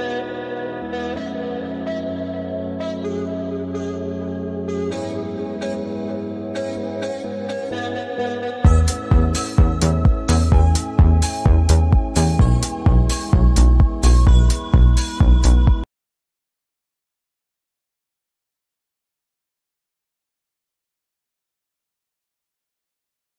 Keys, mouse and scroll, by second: 0.7 click, 5.8 click, 7.3 click, 8.5 shift+Return, 14.4 shift+,, 15.5 click, 15.6 space, 16.0 space.